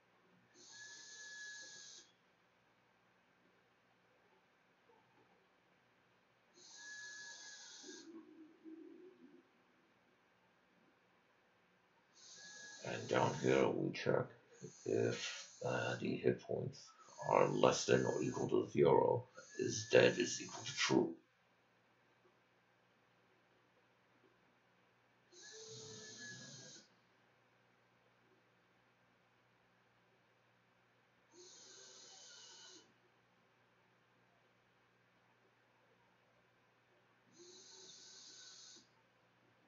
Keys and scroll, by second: 6.7-9.0 typing.